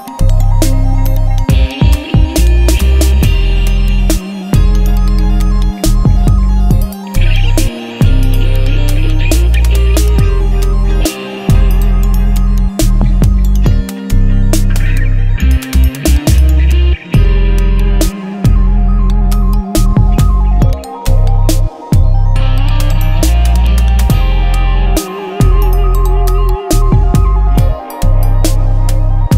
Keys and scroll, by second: 0.0-1.5 typing, 2.0 ctrl+Return, 3.7 v, 7.5 c, 23.1 Return.